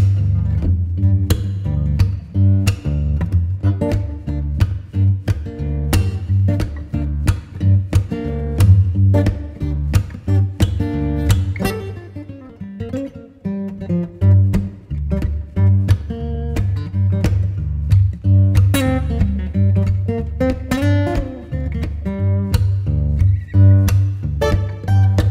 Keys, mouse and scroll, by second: 4.8 Tab, 6.4 ctrl+s, 8.5 KP_1, 9.2 KP_0, 11.1 click, 11.6 click, 12.2-12.8 middle drag, 12.8-13.6 scroll down 6, 13.6-16.6 middle drag, 16.6 alt+r, 17.0 alt+g, 18.3 r, 21.1 g.